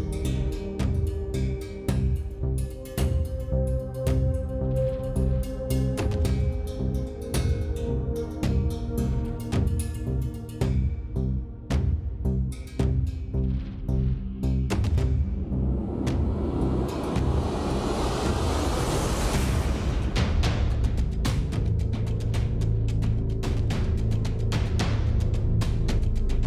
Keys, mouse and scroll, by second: 0.0 s, 0.9 s, 3.8 click, 4.0 click, 5.5 middle click, 6.0 click, 7.1 s, 10.4 middle click, 11.5-13.0 middle drag, 13.2 middle click, 13.7 middle click, 15.2 s, 20.4 Tab, 21.0 h, 21.1-22.3 middle drag, 22.3-23.3 drag, 23.3 middle click, 23.5 click, 24.1 Tab, 25.5 s.